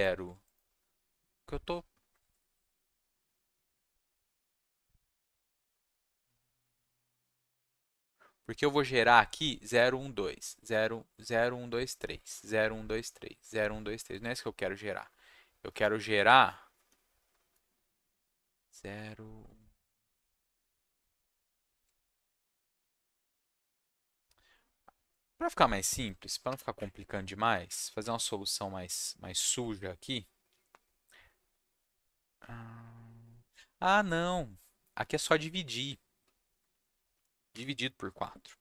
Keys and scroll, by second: 26.7 Up, 27.6 Up, 27.8 ctrl+Down, 29.5 ctrl+Left, 35.0 ctrl+Down, 36.1 ctrl+z, 36.7 Left.